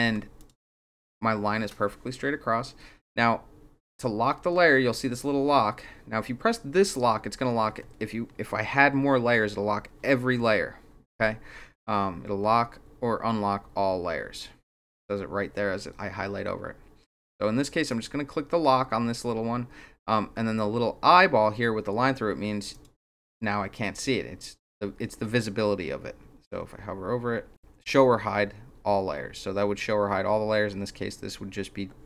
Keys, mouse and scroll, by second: 0.4 click, 17.9 click, 22.7 click.